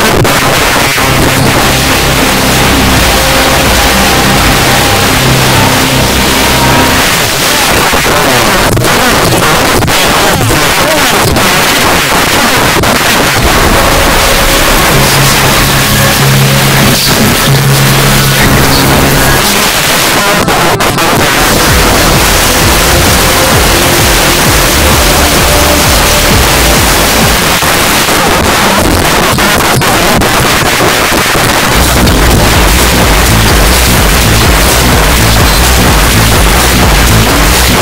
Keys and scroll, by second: 7.0 Page_Down, 19.4 Page_Down, 27.3 Page_Down.